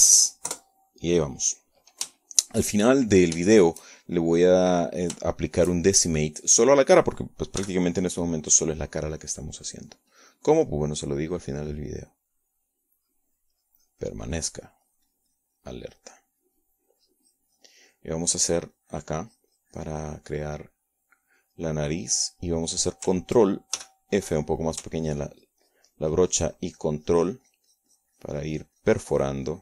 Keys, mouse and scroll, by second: 1.5 KP_Add, 2.3 KP_Enter, 3.9-5.0 shift+drag, 5.2 shift+click, 7.0-8.0 shift+drag, 8.3 click, 9.3 f, 10.4 click, 13.2-22.0 drag, 24.2 click, 25.5 ctrl+f, 26.3 click, 26.7-29.6 ctrl+drag.